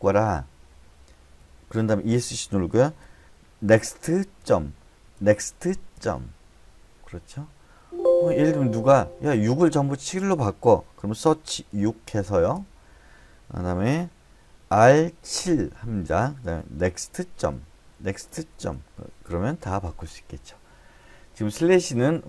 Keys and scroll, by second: 1.4 Escape, 3.7-5.9 typing, 7.8 Escape, 11.3-11.7 typing, 12.5 Return, 14.9-15.4 typing, 16.8-18.5 typing.